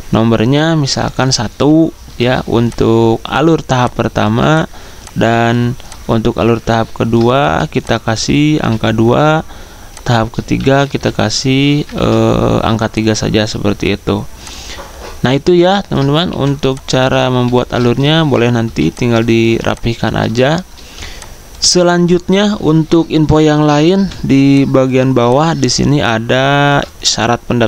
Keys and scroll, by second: 1.8 1, 7.4 t, 8.3 2, 11.9 ctrl+z, 16.3 t, 17.3 3, 18.3-19.1 typing.